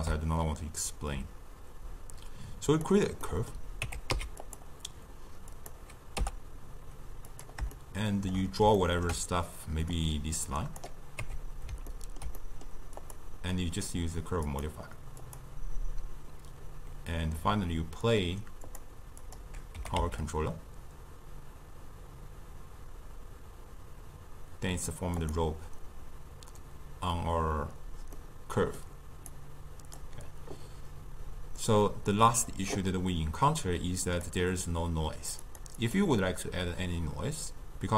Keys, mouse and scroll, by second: 3.2-3.9 middle drag, 3.9 Tab, 4.1 x, 5.5 click, 6.2 t, 7.3 click, 7.8-9.9 shift+middle drag, 9.9-11.2 drag, 11.2 Tab, 11.9-13.0 ctrl+middle drag, 13.0 click, 14.5 click, 18.7 click, 19.2 click, 19.9 g, 28.2-29.3 middle drag, 29.3 drag, 34.1 click, 35.4 click, 35.8-37.9 drag.